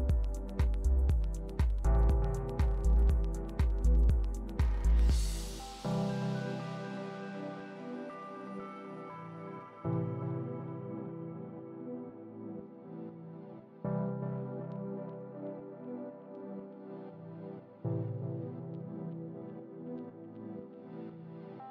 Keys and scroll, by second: 16.6 super+d.